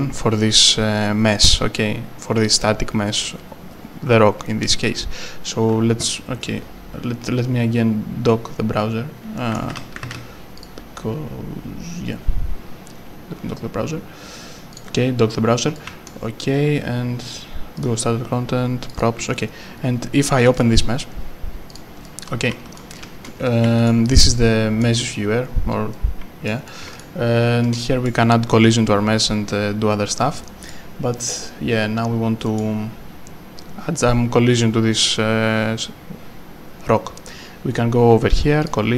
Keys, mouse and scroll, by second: 6.4 click, 9.4 right click, 10.1 ctrl+space, 10.6 click, 14.7 click, 15.7 right click, 15.9 s, 17.7 click, 18.9 double click, 19.6-20.4 scroll down 1, 20.4 scroll down 1, 20.5 double click, 21.7 click, 22.7-23.6 typing, 22.9 right click, 23.4 right click, 24.4 right click, 26.2 right click, 26.4-27.7 typing, 27.6 Right, 30.7 right click, 38.6 click.